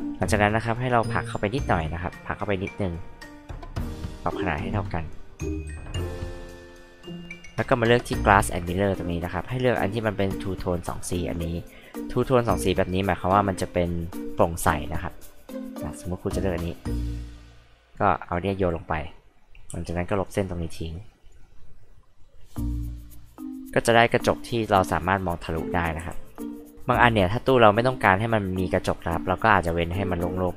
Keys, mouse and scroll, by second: 0.9 click, 2.4 click, 3.9 click, 5.0-6.9 drag, 7.8 click, 11.2 click, 12.1 click, 15.7 click, 17.2 click, 17.9 click, 18.2 click, 18.6 click, 19.7 e, 19.9 click, 20.9 click, 22.2 click, 22.9 click, 26.1 click, 29.2-29.5 drag, 30.3 click.